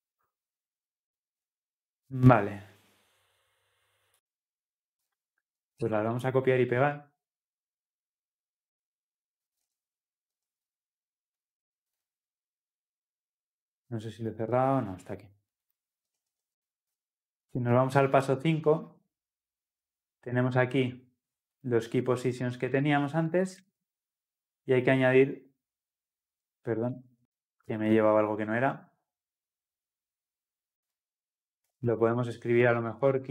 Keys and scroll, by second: 23.7 ctrl+v, 27.2 ctrl+z.